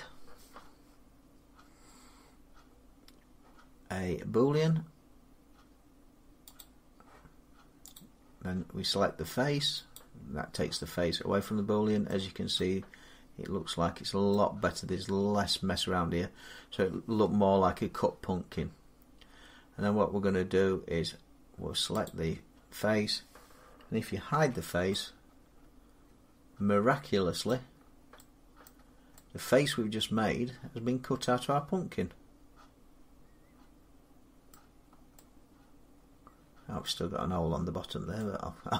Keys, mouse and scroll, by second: 6.4 click, 7.8 click, 9.8 click, 11.9 middle click, 14.2 middle click, 21.9 click, 24.2 h, 27.3 middle click, 27.6-28.0 scroll up 3, 28.0 scroll down 3, 28.5 middle click, 28.7-29.0 scroll down 2, 29.5 scroll, 31.4 scroll down 4, 32.6 scroll up 3, 34.3 middle click, 34.3 scroll down 1, 34.4 scroll up 1, 34.6 scroll down 1, 34.7 scroll, 36.1 scroll down 3, 36.7-38.3 middle click, 36.7 scroll down 1, 37.2-38.0 scroll up 4, 38.6 middle click.